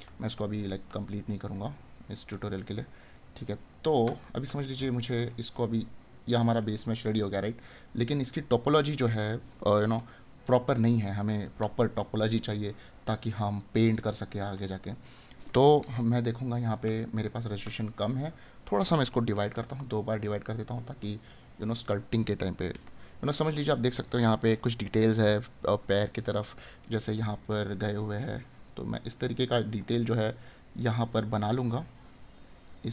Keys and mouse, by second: 3.8 right click, 8.9 right click, 14.4 right click, 27.4 right click, 32.0 right click.